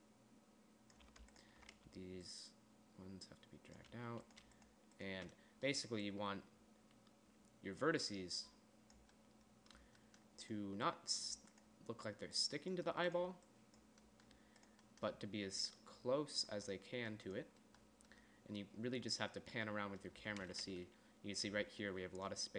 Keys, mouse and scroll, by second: 1.8-6.1 drag, 6.4 middle click, 9.6 middle click, 11.3-14.7 middle drag, 16.9 middle click, 18.2 middle click, 22.0-22.5 d.